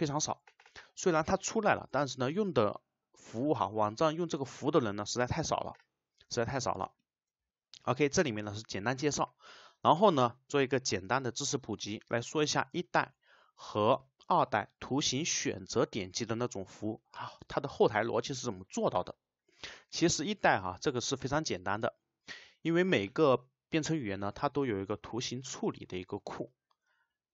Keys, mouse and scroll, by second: 6.8 click, 20.9 click, 21.7 click.